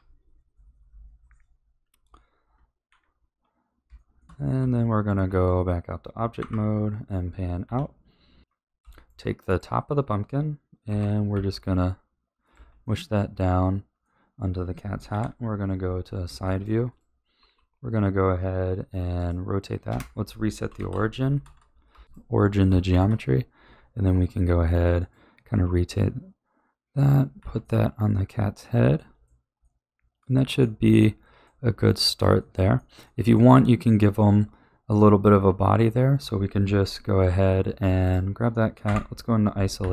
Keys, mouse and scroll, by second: 2.8 KP_1, 3.1-3.9 scroll down 3, 3.9 shift+middle click, 4.5 Tab, 6.3 KP_Divide, 7.6 a, 8.4-8.8 scroll up 2, 8.8-9.4 shift+middle drag, 9.4 click, 10.8 g, 12.5 a, 12.8-15.1 middle drag, 15.1 KP_3, 16.4-16.8 shift+middle drag, 16.8 click, 18.0 r, 19.8 space, 22.8-24.0 shift+middle drag, 24.0 r, 25.5 g, 27.3 a, 27.6-37.1 middle drag, 38.0 click, 38.8 KP_Divide, 39.7 a.